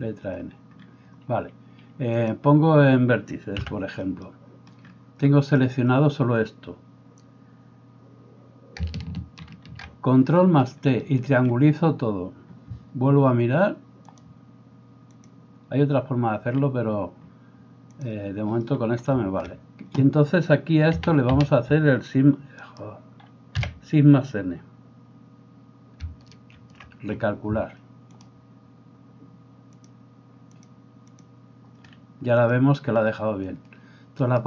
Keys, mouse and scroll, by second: 2.3-34.4 drag, 3.6 n, 4.2 middle click, 9.5 ctrl+t, 21.0 a, 21.4 a, 22.7 right click, 23.6 l, 26.7 shift+n.